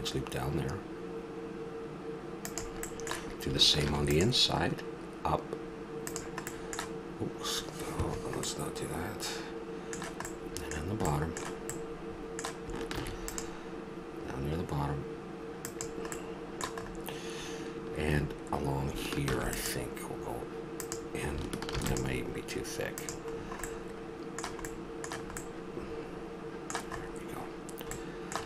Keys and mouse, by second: 3.9 ctrl+r, 8.4-12.9 middle drag, 12.9 ctrl+r, 13.3 click, 19.2 ctrl+r, 21.7 ctrl+r, 25.9 middle click, 26.7 middle click.